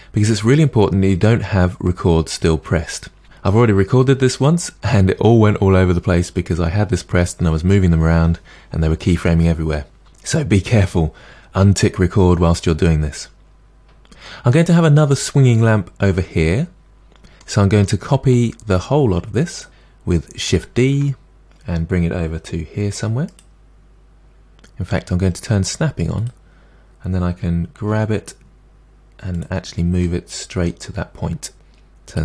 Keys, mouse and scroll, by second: 13.7-14.2 scroll up 1, 14.2-19.6 middle drag, 19.6 shift+click, 20.9 shift+d, 26.3 click, 27.8 g, 30.0-32.1 middle drag, 32.1 click.